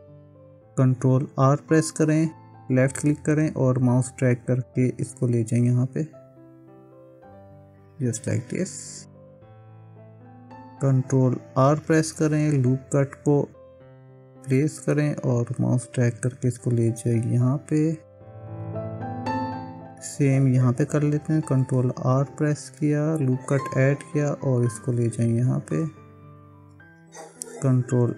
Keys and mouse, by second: 1.6 ctrl+r, 11.7 ctrl+r, 21.2 ctrl+r.